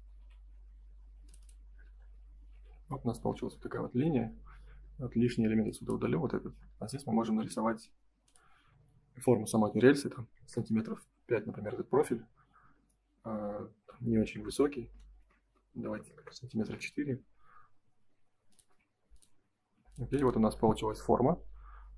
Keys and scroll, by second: 0.1 g, 2.5 shift+f, 3.7 ctrl+a, 6.4 space, 7.3 l, 10.6 Return, 15.1 BackSpace, 15.8 4, 16.1 Return, 19.5 space, 20.8 ctrl+s.